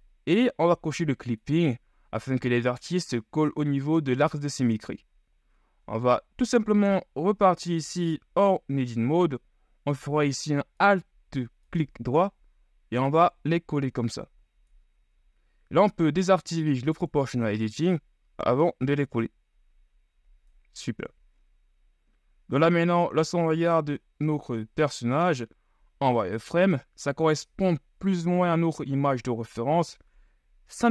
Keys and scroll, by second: 6.8 Tab, 15.2 ctrl+z, 21.1 Tab, 24.5 KP_1, 26.0 z.